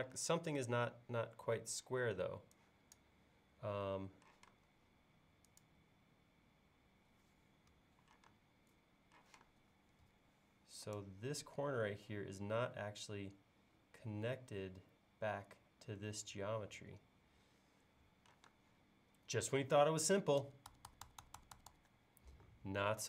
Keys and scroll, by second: 4.4 m, 7.7 Escape, 8.3 space, 9.3 m, 18.0 Escape, 20.4 super+z.